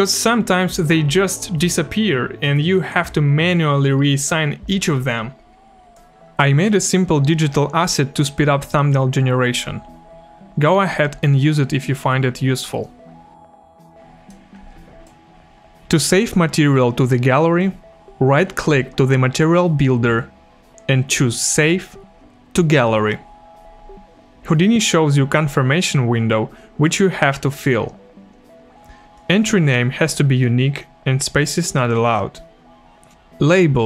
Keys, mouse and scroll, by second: 5.9 click, 13.9 click, 19.4 click, 19.8 right click, 21.5 click, 29.1 click, 31.3 click, 33.1 click.